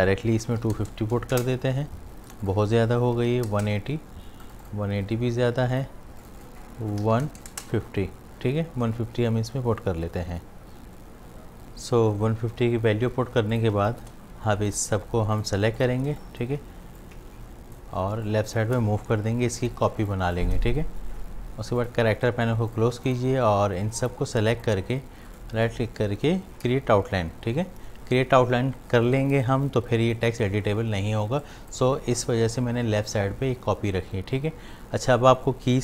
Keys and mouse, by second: 2.3 click, 13.3 space, 13.5 ctrl+alt+click, 13.9 click, 15.4 shift+click, 16.1 shift+space, 16.2 click, 17.0 alt+click, 18.1 shift+space, 18.3 click, 18.6 space, 20.1 click, 20.4 space, 21.8 click, 25.3 right click, 31.4 click.